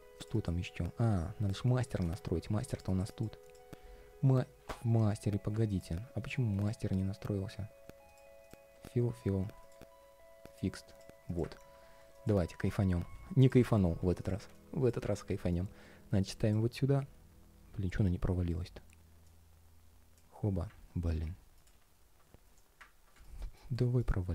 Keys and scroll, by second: 20.8 super+x, 21.5 super+v.